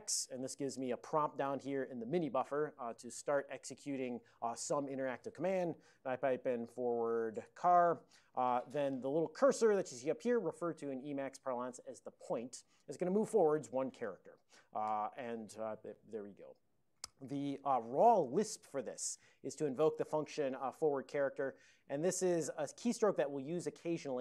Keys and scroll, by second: 5.8-8.4 typing.